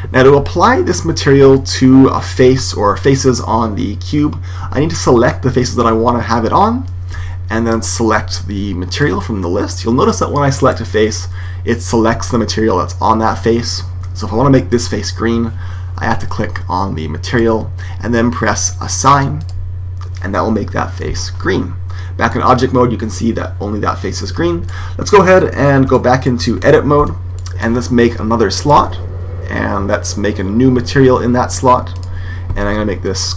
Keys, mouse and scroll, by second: 5.4 right click, 8.8 click, 10.5 right click, 14.6 right click, 17.2 click, 19.3 click, 21.0 Tab, 26.9 Tab, 28.5 click, 31.8-33.3 drag.